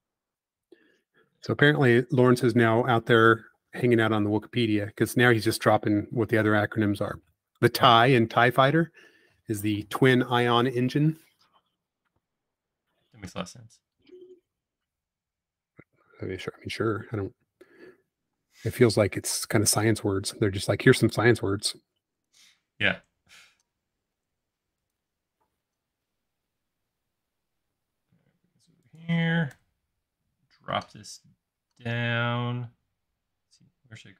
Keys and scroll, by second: 0.8 m, 3.5 Escape, 8.9 space, 14.2 space, 16.7 m, 17.9 super+z, 18.4 space, 19.1 m, 20.9 typing, 22.9 m.